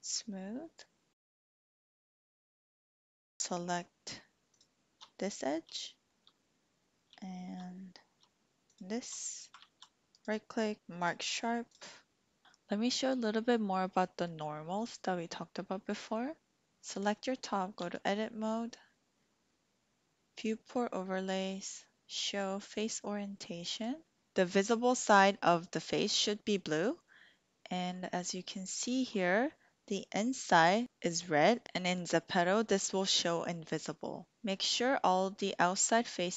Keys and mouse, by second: 0.0 click, 2.0 ctrl+b, 3.0 click, 5.8 shift+click, 7.2 shift+click, 8.6 alt+shift+click, 9.5 ctrl+z, 10.1 click, 16.9 click, 17.8 Tab, 20.4-23.8 drag, 27.1 middle click, 28.5 shift+middle click, 29.3 middle click, 30.8 middle click.